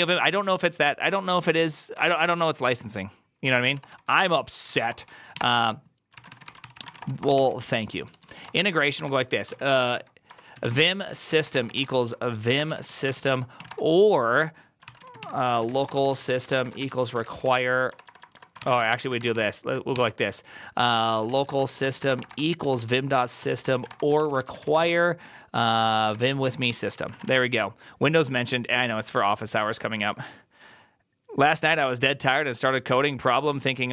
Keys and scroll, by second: 0.0-0.3 typing, 3.3-27.7 typing, 6.0 ctrl+c.